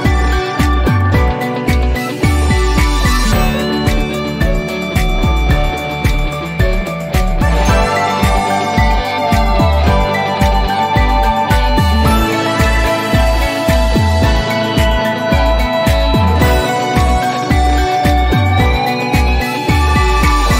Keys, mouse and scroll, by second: 1.4 click, 5.2 click, 5.3 t, 7.2 click, 8.0 scroll up 1, 9.5-15.2 drag, 18.8 scroll up 1.